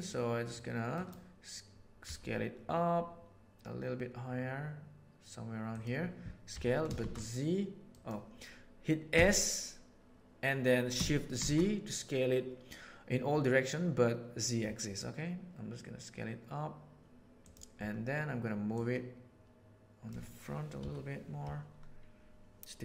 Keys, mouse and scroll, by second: 0.5 right click, 1.0-1.6 middle drag, 1.9 s, 6.5 s, 9.1 s, 18.7-20.0 drag, 20.7 KP_7.